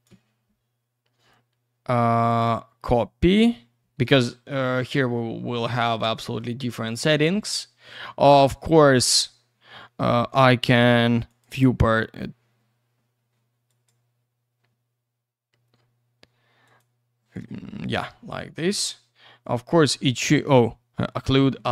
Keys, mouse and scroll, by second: 2.1 click, 2.3 click, 4.0 click, 4.1 click, 4.6 click, 6.2 middle click, 6.4 middle click, 11.3 click, 11.4 click, 13.7 click, 13.8 click, 16.6 click, 16.8 click, 17.9 click, 21.2 click, 21.3 click.